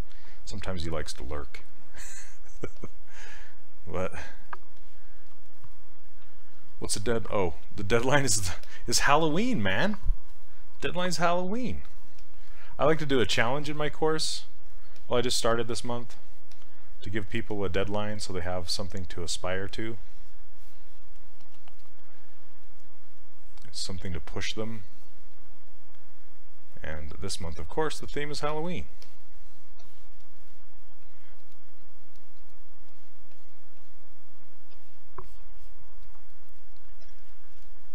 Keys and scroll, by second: 21.4 s, 28.5 s.